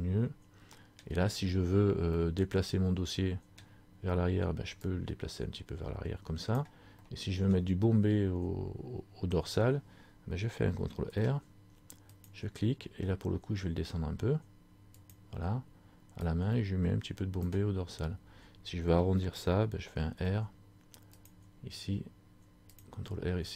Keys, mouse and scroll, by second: 2.3 middle click, 2.3 scroll up 1, 3.8-4.9 scroll down 1, 5.0 click, 7.1 middle click, 7.1 scroll up 1, 11.2 ctrl+r, 16.4 click, 20.2 ctrl+r, 22.9 click.